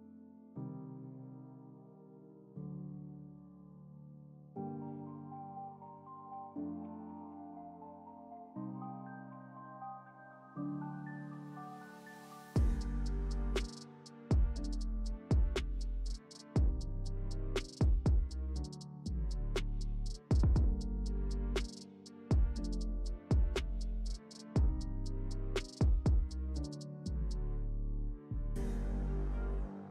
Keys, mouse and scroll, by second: 0.8-2.0 drag, 3.3-4.4 drag, 4.4-8.0 drag, 11.2-11.9 click, 12.5-13.2 space, 13.6 click, 13.7-15.2 space, 15.0 space, 15.3-20.7 drag, 24.0 click, 26.5 click, 28.1 click, 29.8 Down.